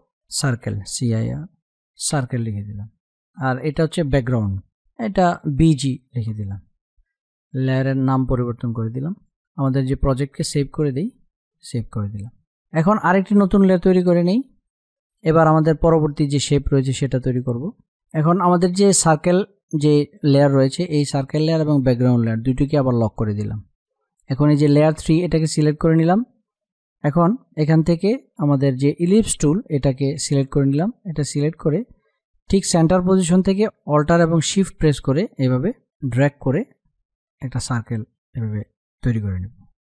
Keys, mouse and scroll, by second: 0.4-2.0 typing, 2.0 Return, 3.5 click, 5.5 shift+g, 8.1 space, 8.3 click, 8.6 space, 9.0 click, 12.2 space, 12.4 click, 13.8 space, 13.9 click, 14.3 space, 16.6 click, 17.0 space, 20.7 click, 25.1 space, 25.2 click, 25.6 space, 27.3 click, 33.3-39.5 alt+shift+drag.